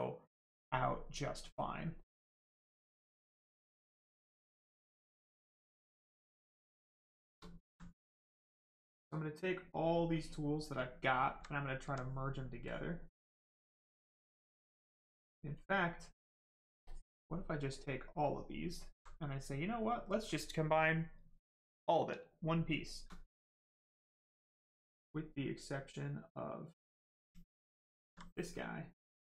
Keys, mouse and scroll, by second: 0.7 right click, 2.6 shift+right click, 4.2 shift+click, 4.3 click, 6.0 alt+right click, 6.4 right click, 6.4 right click, 7.1 shift+right click, 7.4 alt+right click, 8.5 click, 8.6 click, 10.8 alt+right click, 12.6 click, 12.6 click, 14.0 right click, 14.8 alt+right click, 16.8 click, 16.8 click, 17.4 right click, 18.2 alt+right click, 19.2 right click, 19.3 right click, 22.3 right click, 22.6 shift+right click, 24.9 click, 26.8 right click, 27.6 alt+click.